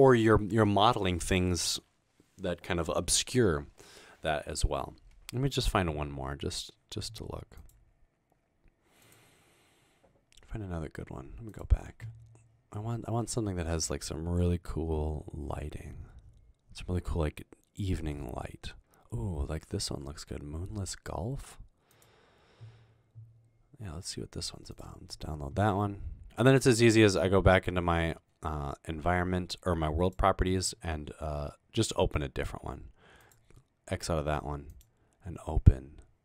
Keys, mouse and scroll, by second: 13.3-19.2 scroll down 9, 30.1 click, 33.3 click.